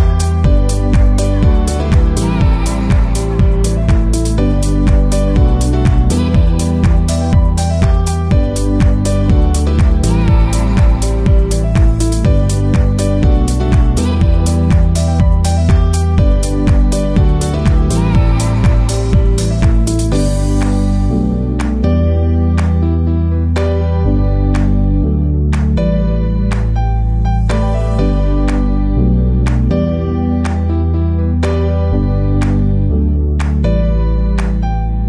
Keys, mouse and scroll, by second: 0.6 right click, 0.9-3.5 drag, 1.0-2.2 right drag, 2.4 l, 5.8-7.8 right drag, 16.2 BackSpace, 17.2 KP_Decimal, 18.0-19.3 middle drag, 19.3-23.6 drag, 19.3 right click, 19.5 middle click, 21.7-23.6 middle drag, 23.7-29.7 drag.